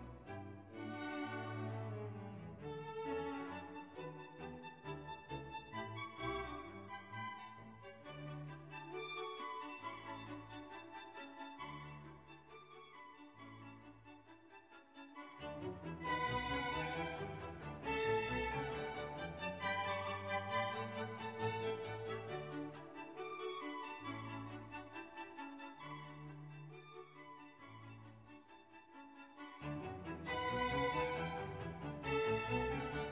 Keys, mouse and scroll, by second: 1.0 click, 2.5-8.5 drag, 8.9 click, 10.4 click, 11.4-13.7 drag, 15.5 click, 19.3-21.4 drag, 22.8 click, 27.8 click, 30.6 f, 31.8 click, 32.8-33.1 typing.